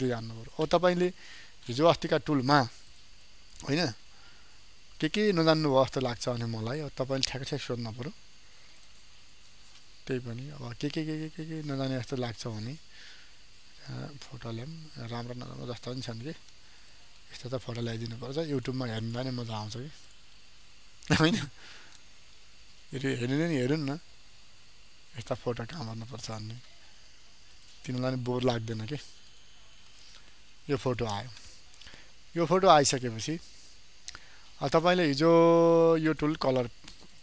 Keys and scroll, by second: 28.9 ctrl+space.